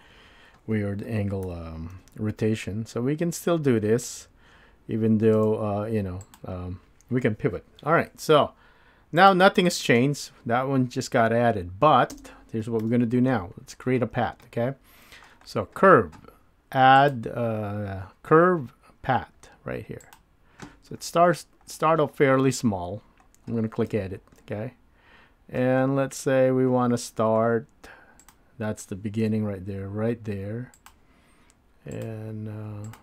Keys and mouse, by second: 1.4 r, 6.2 click.